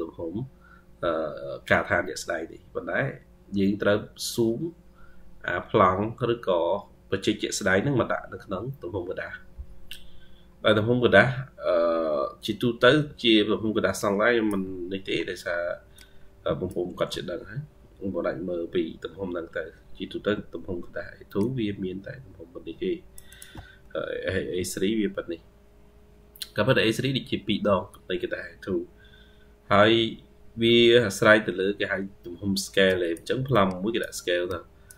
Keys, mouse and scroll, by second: 9.9-12.9 scroll up 54, 13.9-14.5 ctrl+scroll up 3, 14.7-15.3 ctrl+scroll up 6, 20.5-21.1 ctrl+q, 21.2 ctrl+click, 21.4-23.3 ctrl+q.